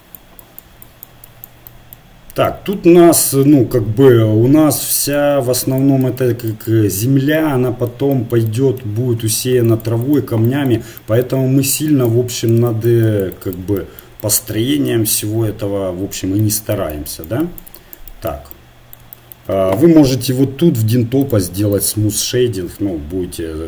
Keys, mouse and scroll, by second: 3.5-5.1 middle drag, 5.1-7.6 drag, 7.6 middle click, 8.2 click, 8.3-9.7 middle drag, 9.7-19.1 drag, 19.1-22.6 middle drag, 22.6 click.